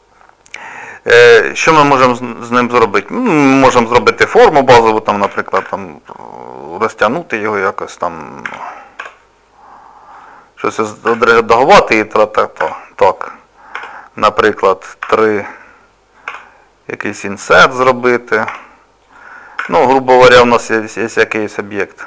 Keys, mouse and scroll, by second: 5.3 s, 7.4 middle click, 8.5 s, 11.1 Tab, 11.9 middle click, 12.6 Tab, 13.8 Tab, 15.1 3, 15.3 click, 16.3 i, 17.5 middle click, 18.5 e, 19.6 Tab, 19.9 middle click.